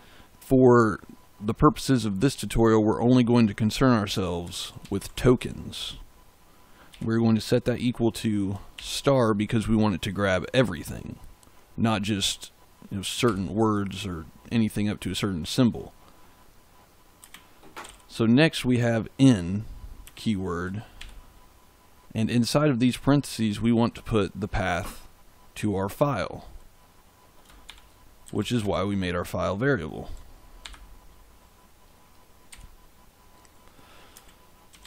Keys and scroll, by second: 4.1-5.8 typing, 6.8 =, 8.7 shift+8, 13.2 Right, 17.1 space, 17.7 i, 18.9 n, 20.0 space, 20.9 shift+9, 27.6-29.0 typing, 30.5 shift+5, 32.4 Right, 34.0-34.8 typing.